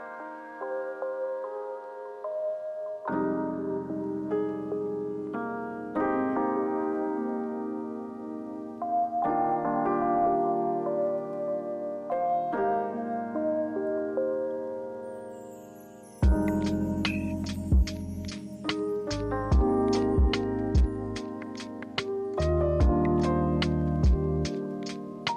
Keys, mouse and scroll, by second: 3.1-3.4 alt+scroll, 6.1 alt+scroll, 10.1 ctrl+2, 11.5 ctrl+g, 11.9 ctrl+a, 12.6 ctrl+z, 14.7 ctrl+c, 14.9 ctrl+f.